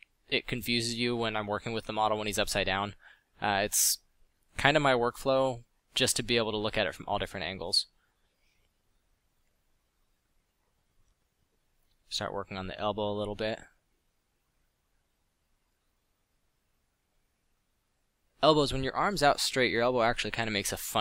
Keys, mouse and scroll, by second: 4.3 f, 11.4 f, 14.7 f, 15.9 f, 17.5 f, 18.4 f, 18.7 f, 20.2 f.